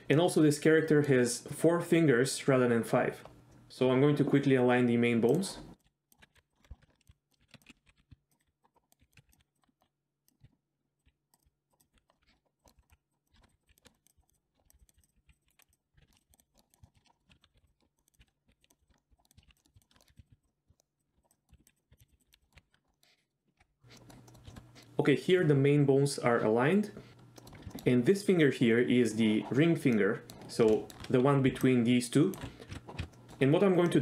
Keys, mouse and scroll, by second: 0.1-1.1 middle drag, 3.5 middle drag, 5.3 click, 5.8-16.3 typing, 6.1 middle click, 6.3 click, 6.5 click, 6.5 shift+middle click, 6.9 shift+middle click, 7.3 click, 7.9 click, 8.4 click, 8.7 click, 9.1 click, 9.3 click, 11.0 click, 11.3 click, 11.7 click, 11.8 click, 12.1 middle click, 12.3 shift+middle click, 12.6 shift+middle click, 13.6 click, 13.8 shift+click, 14.2 click, 14.3 click, 14.9 click, 15.0 click, 15.5 click, 16.2 click, 16.5 shift+middle click, 16.7 middle click, 16.9 shift+middle click, 17.1 middle click, 17.3-22.5 typing, 17.6 click, 17.7 middle click, 17.8 scroll down 2, 18.0 middle click, 18.0 click, 18.2 ctrl+g, 18.3 middle click, 18.6 click, 18.7 middle click, 18.8 click, 18.9 shift+middle click, 19.2 middle click, 19.2 scroll down 1, 19.3 click, 19.5 ctrl+click, 19.6 middle click, 19.7 click, 19.8 middle click, 19.9 shift+click, 20.1 click, 20.4 middle drag, 20.8 middle click, 21.0 click, 21.1 middle click, 21.2 drag, 21.3 middle drag, 21.5 right click, 21.7 click, 21.8 middle click, 22.2 click, 22.4 middle click, 22.7 ctrl+click, 22.7 middle click, 23.2 middle click, 23.9 middle drag, 24.3 middle click, 24.5 shift+middle click, 24.7 middle click, 27.4 middle click, 27.7 shift+middle click, 29.9-30.3 middle drag, 30.8 shift+middle click, 31.5-32.4 d, 31.6-32.3 drag, 32.7 ctrl+a, 33.0 ctrl+z, 33.1 middle drag, 33.9 middle click.